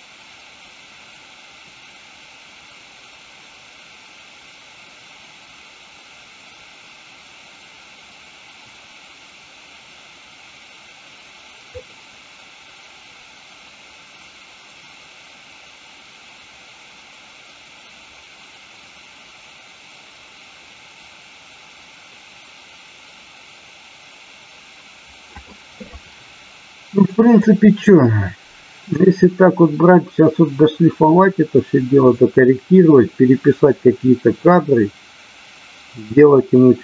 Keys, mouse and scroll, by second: 27.3-36.8 drag.